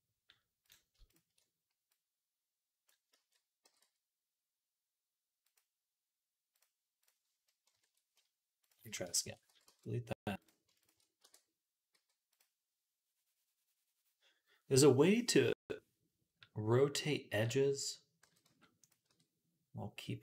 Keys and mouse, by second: 0.5 alt+shift+middle click, 0.9 alt+shift+click, 1.0 alt+shift+middle click, 1.8-5.4 drag, 3.0 ctrl+z, 3.5 g, 5.4-6.8 middle drag, 6.8 click, 7.1-10.2 ctrl+middle drag, 7.5 ctrl+KP_Add, 9.1 ctrl+KP_Add, 9.3 x, 10.2 click, 11.0 e, 14.1-18.1 drag, 18.1 g, 18.9 r.